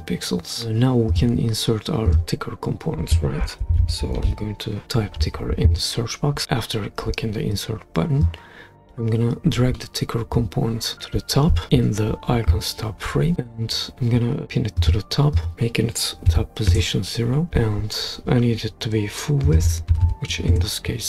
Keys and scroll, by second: 3.2-5.6 typing, 16.3 0, 16.7 Return, 19.6-20.5 typing.